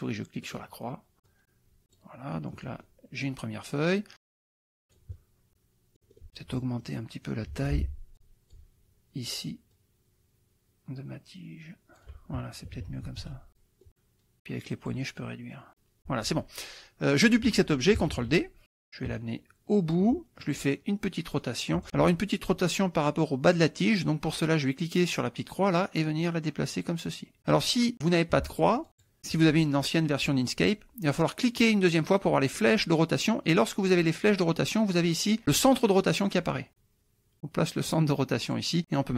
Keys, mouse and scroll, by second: 0.4 click, 1.3 click, 2.6 click, 3.2-6.3 drag, 6.8 click, 7.5 F2, 7.6 click, 8.2 click, 9.7-12.2 shift+drag, 12.6 shift+KP_Subtract, 13.8 click, 14.4 click, 15.6 click, 16.0 F1, 18.2 ctrl+d, 18.7-20.1 ctrl+drag, 20.4 ctrl+click, 21.4 click, 21.9 ctrl+z, 25.6-27.4 drag, 28.5 ctrl+z, 29.0 click, 31.5 click, 36.2-38.8 drag.